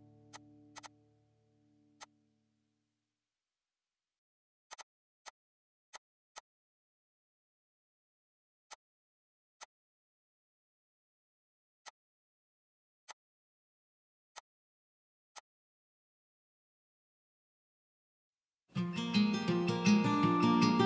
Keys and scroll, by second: 1.5 ctrl+g, 2.9 Escape, 3.3 ctrl+x, 4.0 Escape, 4.1 Escape, 4.8 Escape, 5.0 Escape, 19.9 alt+h.